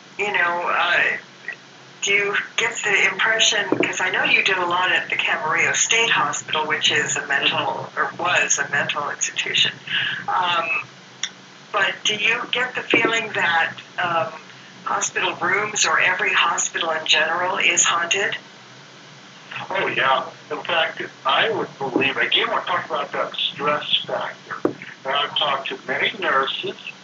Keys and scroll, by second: 0.0 a, 2.3 w, 10.5 w, 19.2 w, 24.4 w.